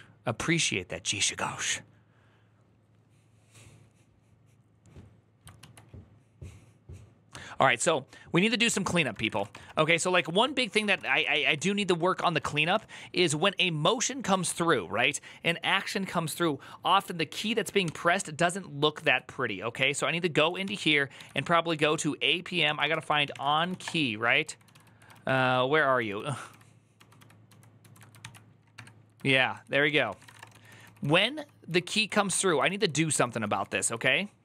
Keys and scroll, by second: 5.4 alt+{, 9.0-12.5 typing, 10.2 ctrl+d, 10.3 ctrl+d, 14.1 typing, 18.8 ctrl+p, 20.4 ctrl+c, 20.9-24.1 typing, 24.2 ctrl+q, 24.4 ctrl+j, 24.5 ctrl+u, 25.8 ctrl+k, 27.3 ctrl+j, 27.6 ctrl+j, 28.0 ctrl+c, 28.5 *, 29.2 ctrl+c, 29.4 ctrl+c, 29.6 ctrl+w, 29.7 ctrl+o, 30.0 ctrl+:, 30.2 Return, 30.3-33.6 typing.